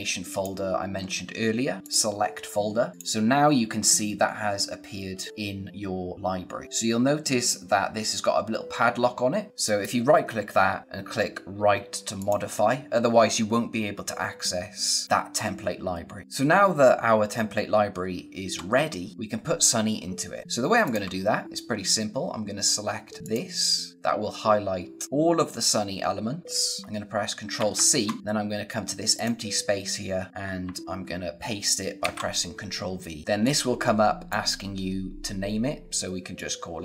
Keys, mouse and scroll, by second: 2.4-2.9 scroll down 1, 2.9 click, 4.7-5.0 scroll up 1, 5.0 scroll down 1, 9.6 right click, 12.1 click, 16.2 click, 20.7 click, 23.2 click, 27.5 ctrl+c, 29.0 click, 30.5 ctrl+Num_Lock, 31.9 ctrl+v, 33.3 click.